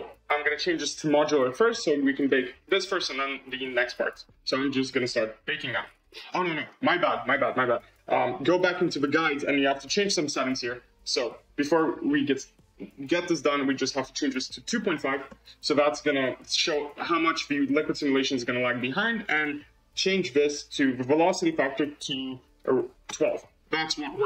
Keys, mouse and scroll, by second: 0.4-1.5 drag, 1.5-2.7 scroll up 17, 2.7-3.0 scroll down 7, 3.1-5.6 scroll up 6, 6.2-8.1 scroll down 24, 13.7-16.1 drag, 20.1-22.6 drag.